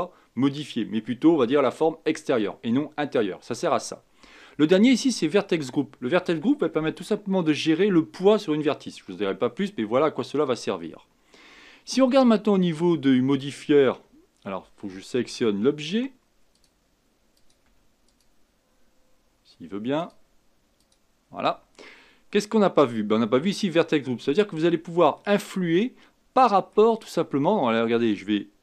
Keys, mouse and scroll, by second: 13.3 click, 15.2 Tab, 16.5 click, 17.7 Tab, 18.0-20.9 drag, 24.7-25.2 scroll down 2, 25.2-28.2 middle drag.